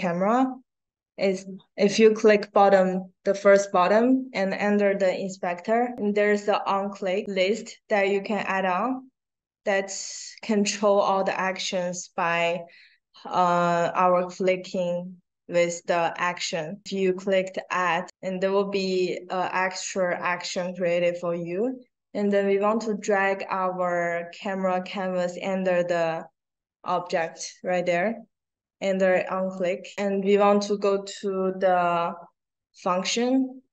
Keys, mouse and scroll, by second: 0.1-1.0 scroll down 2, 22.2-29.4 drag.